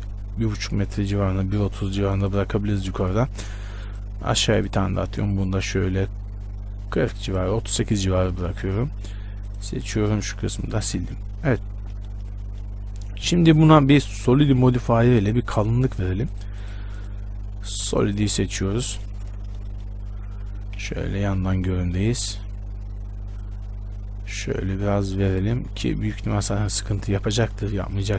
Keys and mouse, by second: 3.8 ctrl+r, 4.2-7.7 drag, 4.5 ctrl+r, 9.7 click, 10.2 middle click, 10.4 click, 10.4 x, 11.2 Tab, 11.4 middle click, 14.6-21.0 drag, 21.0 KP_1, 23.6-28.1 drag.